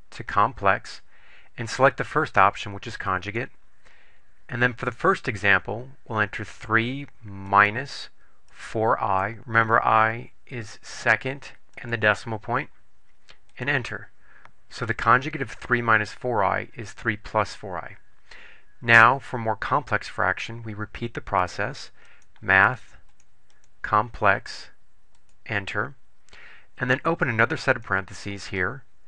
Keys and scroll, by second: 3.3 Return, 6.5 3, 7.7 -, 8.7 4, 11.9 ., 13.7 Return, 23.2 Right, 23.7 Right, 25.3 Return, 27.8 (.